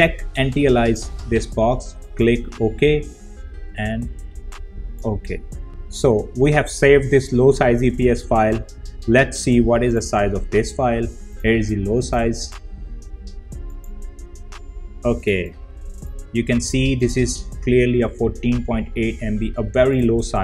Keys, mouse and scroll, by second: 0.6 click, 4.3-5.7 drag, 9.7 click, 11.8 right click, 13.5 click, 19.7 click.